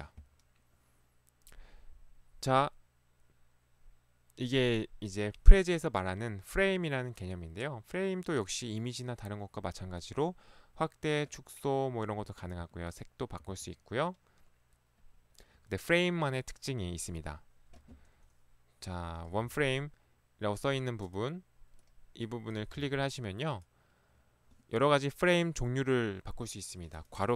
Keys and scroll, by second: 22.8 ctrl+Escape, 22.9 ctrl+1.